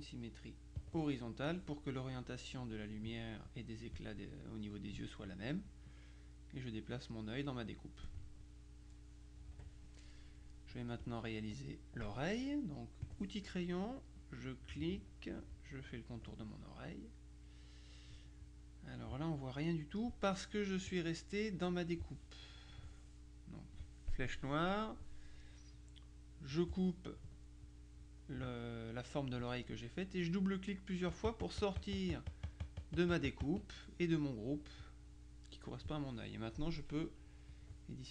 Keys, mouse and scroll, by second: 0.9 click, 6.0-8.5 drag, 9.5 KP_Subtract, 10.5 middle click, 11.1 click, 13.1 click, 14.3-16.7 drag, 22.8 click, 26.6 click, 31.2 click, 37.6 click.